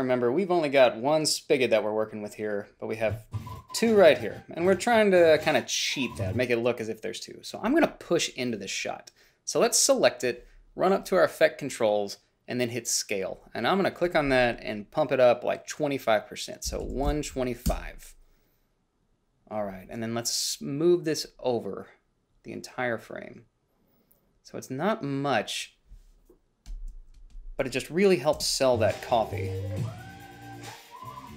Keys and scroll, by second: 16.7-17.9 typing, 17.9 Return, 28.6 space.